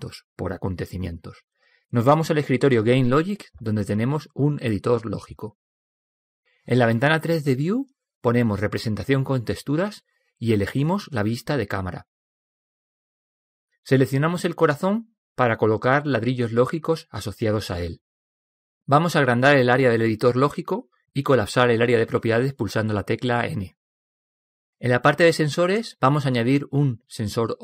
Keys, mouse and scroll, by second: 2.5-4.4 drag, 9.0 KP_0, 10.9 alt+z, 16.4-20.9 right drag, 22.3-27.6 drag.